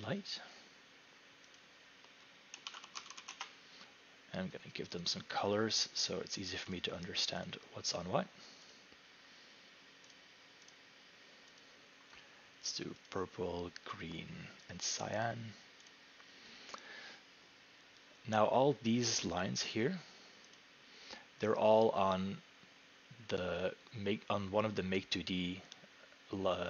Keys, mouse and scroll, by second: 0.0 right click, 1.5-3.7 typing, 1.6 click, 5.0 click, 6.8 click, 7.5 click, 8.7 click, 10.1 click, 10.7 click, 11.6 click, 13.1 click, 14.9 click, 15.2 click, 15.9 click, 19.5 click, 20.6 click.